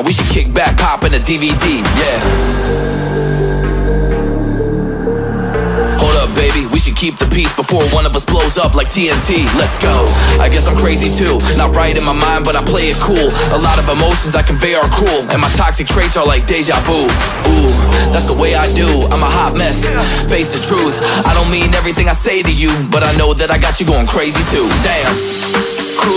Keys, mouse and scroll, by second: 3.6 shift+click, 3.8 shift+right click, 8.3 right click, 12.7 ctrl+z, 14.4 right click, 18.4 alt+scroll down 1, 18.7-19.2 alt+scroll up 1, 19.9 alt+scroll down 1, 20.3 ctrl+z, 22.3 right click.